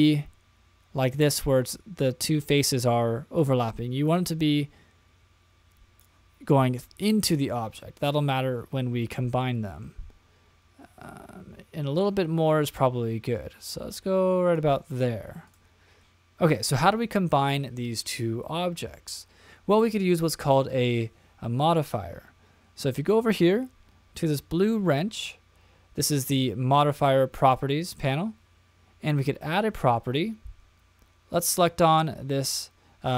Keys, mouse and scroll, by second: 4.4 click, 7.8 middle click, 8.4-9.4 scroll down 3, 9.4 middle click, 11.0 click, 15.4 click, 15.9-16.3 scroll down 1, 27.4 click, 31.5 click.